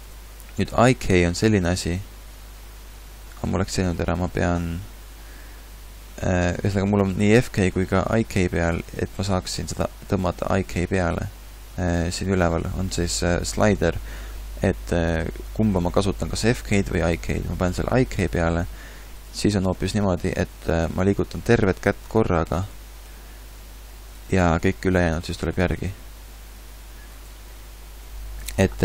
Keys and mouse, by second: 7.2 a, 19.7 g, 21.7 g, 23.1 r, 25.1 g.